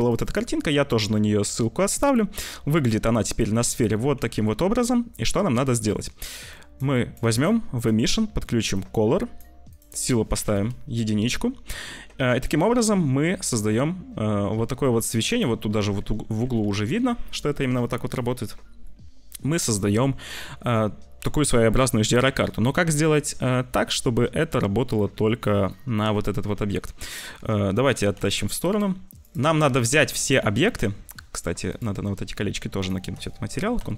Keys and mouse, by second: 2.3 middle click, 2.8 middle click, 3.1 middle click, 3.5 click, 3.5 middle click, 4.4 `, 5.2 middle click, 5.6 click, 6.5 click, 7.0 click, 7.3 click, 7.7 click, 8.9 click, 9.6 click, 12.2 g, 16.2 ctrl+z, 18.2 click, 27.9 g, 30.7 shift+middle click, 31.6 click, 32.7 shift+click, 33.7 ctrl+l.